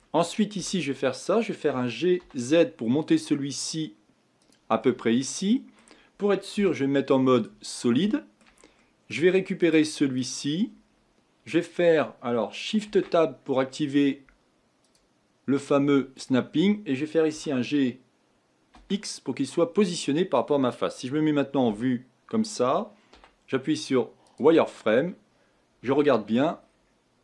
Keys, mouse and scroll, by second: 0.6 KP_1, 1.7 g, 4.8-6.5 middle drag, 6.5 z, 7.7-8.0 scroll down 3, 8.1-9.6 shift+middle drag, 9.6-10.6 drag, 12.8 shift+Tab, 14.8-17.3 drag, 17.3 g, 21.7 KP_1, 23.1 z, 24.8-25.9 scroll up 5, 25.9 shift+middle click, 26.6-27.2 scroll up 6.